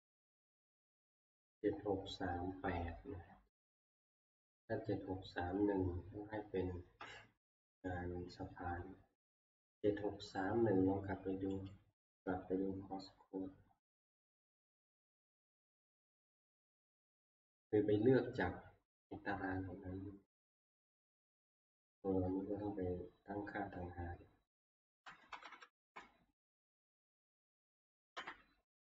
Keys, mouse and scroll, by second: 8.2 Escape, 11.7-13.7 drag, 14.9 click, 16.2 click, 17.5 click, 24.7 click, 25.2 Left, 25.5 Left, 25.6 Left, 25.8 Left, 26.5 ctrl+Down, 27.5 Right, 28.0 ctrl+Up, 28.2 ctrl+Up.